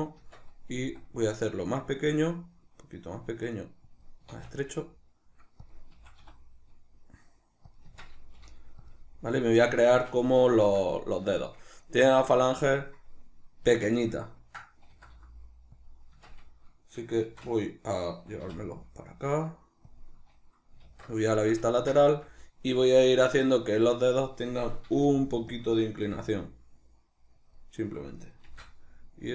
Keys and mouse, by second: 0.2 Tab, 0.8 s, 4.1 click, 4.3 s, 5.7 click, 5.9 s, 7.7 click, 7.9 Tab, 8.4 g, 8.9 click, 9.9-15.9 shift+middle drag, 13.7 Tab, 14.9 s, 15.9 click, 16.1 Tab, 17.3 shift+d, 20.0 click, 20.9 alt+q, 21.4-26.0 shift+middle drag, 24.9 r, 25.6 click, 26.0 g, 27.5 click, 28.4 shift+d.